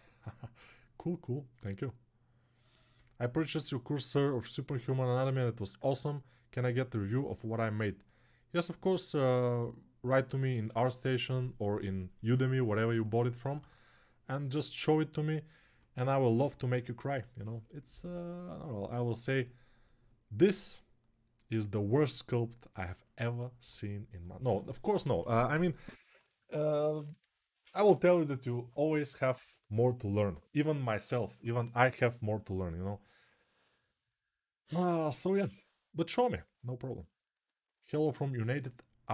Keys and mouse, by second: 24.3-39.1 right drag.